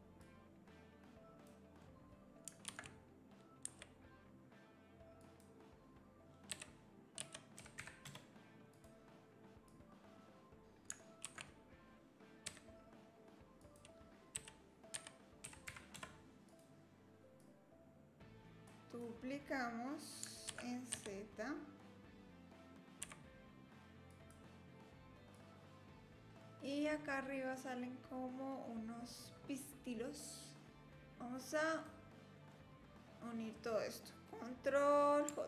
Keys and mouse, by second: 0.2-1.5 drag, 1.8 click, 2.7 shift+d, 6.5 r, 9.7 click, 11.3 shift+d, 14.3 r, 17.4-18.7 drag, 18.8 click, 20.5 shift+d, 23.0 s, 25.4 click, 26.4-26.9 drag, 31.2 click, 32.5-33.6 drag.